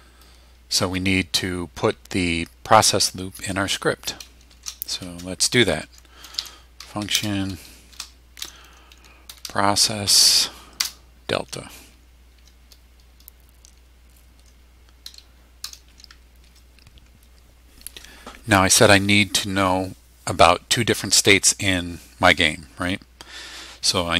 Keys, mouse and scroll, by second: 4.5-7.9 typing, 9.0-9.9 typing, 10.8 Return, 15.6 Return, 16.5 Tab.